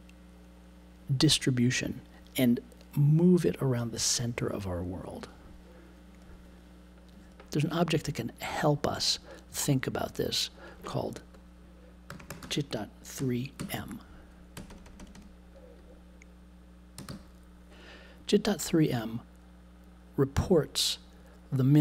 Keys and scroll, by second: 12.1 j, 12.4 ., 13.1 3, 16.9 3.